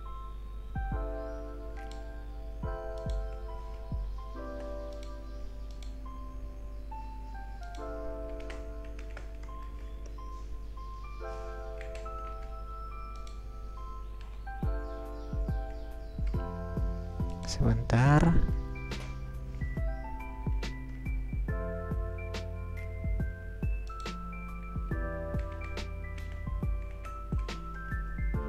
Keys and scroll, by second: 3.8 BackSpace, 4.3 BackSpace, 4.6 BackSpace, 8.4-9.5 typing, 11.4 Return, 12.0 Left, 12.6 BackSpace, 15.3 Return, 17.2 BackSpace, 18.5 1, 19.3 Return, 20.5 BackSpace, 21.5 Return, 25.4 Delete, 26.2 Delete, 26.9-27.4 typing.